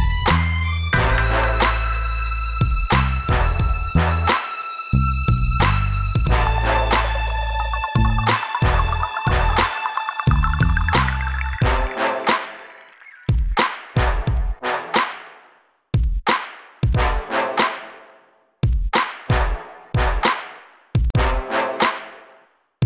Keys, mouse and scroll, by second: 3.4 click, 3.5 click, 3.6 click, 3.7 click, 4.2 middle click, 14.3 click, 14.4 click, 14.8 middle click, 20.2 right click, 20.3 right click, 20.7 middle click, 22.2 scroll down 1.